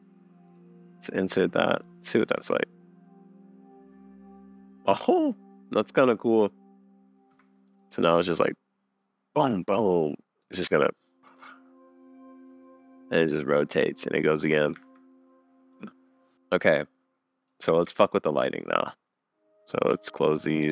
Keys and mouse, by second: 2.1 middle click, 2.4 space, 5.9 click, 7.3 space, 10.4 middle click, 10.5 space, 14.0 middle click, 14.4 space, 14.8 super+s, 16.3 space, 17.1 click, 17.7 super+s, 20.2 click, 20.6 click.